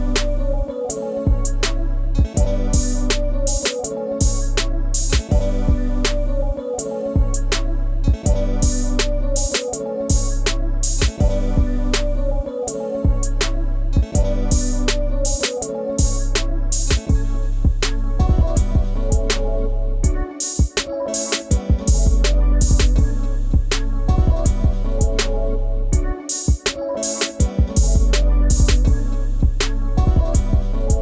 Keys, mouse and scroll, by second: 2.2 ctrl+z, 13.6 scroll up 1, 13.7 space, 13.8 ctrl+click, 14.5 ctrl+click, 18.9 scroll up 1, 19.1-19.4 scroll down 1, 19.5 ctrl+space, 19.6 ctrl+click, 19.8 ctrl+space, 20.1 ctrl+scroll up 1, 26.8 space, 26.9 ctrl+click.